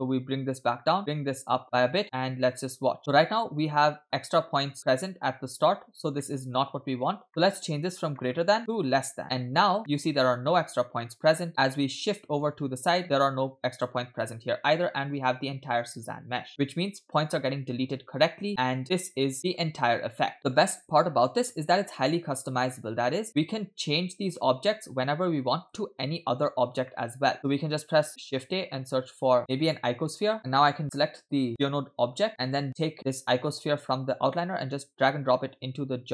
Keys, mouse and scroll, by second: 1.4 click, 2.3 click, 3.8 middle click, 4.4-4.7 shift+middle drag, 4.7-5.2 scroll up 1, 5.2 scroll up 1, 5.3-6.7 shift+middle drag, 7.3-9.2 scroll up 6, 7.5 middle click, 8.2 middle click, 8.6-9.2 drag, 9.2-9.7 scroll down 2, 9.8 middle drag, 11.6-14.3 drag, 15.0-16.2 middle drag, 16.5-19.5 drag, 19.9 space, 20.4 click, 20.8 space, 24.6 space, 25.9 space, 26.4-26.8 scroll down 3, 26.9-27.5 shift+middle drag, 28.2 shift+a, 30.4 middle click, 30.4-30.8 scroll down 2, 30.8 click, 32.4 click, 34.2 click.